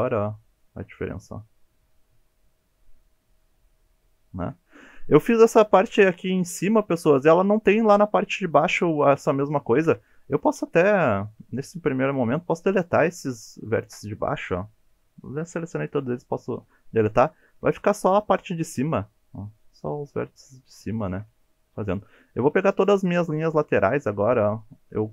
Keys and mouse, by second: 4.8 middle click, 6.3 1, 6.7-8.0 middle drag, 9.8 KP_1, 10.6 1, 11.4 alt+z, 11.9 click, 13.8 Delete, 17.2 middle click, 17.7 alt+z, 18.0-20.8 middle drag, 21.0 shift+middle click, 22.2 2, 23.0 click, 24.3 middle click.